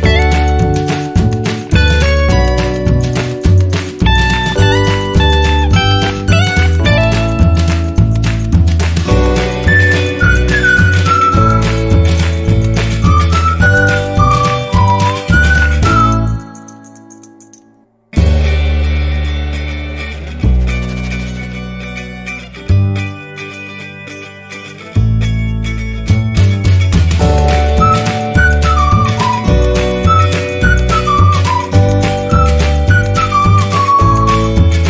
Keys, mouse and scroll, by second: 0.2 click, 1.8 Return, 2.8 click, 9.6 space, 9.9 click, 10.0 space, 10.1 space, 11.3 scroll down 1, 12.4 scroll up 1, 14.5 scroll down 1, 15.1 click, 17.4 click, 24.6 click, 29.0 [, 29.1 click, 29.4 ctrl+z, 29.6 ], 29.7 ], 29.8 click, 30.6-31.8 drag, 31.9 [, 32.0 click.